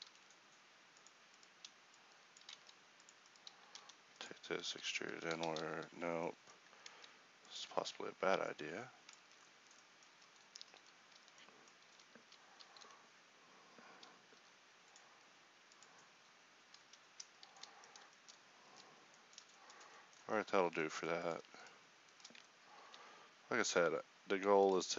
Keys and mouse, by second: 0.1 alt+s, 2.5 ctrl+Tab, 3.8 e, 4.7 s, 5.5 ctrl+z, 6.9 ctrl+Tab, 9.3 Tab, 10.2 Tab, 10.8 ctrl+r, 11.9 a, 12.3 a, 17.5 a, 18.7 Tab, 20.3 Tab, 22.9 ctrl+b.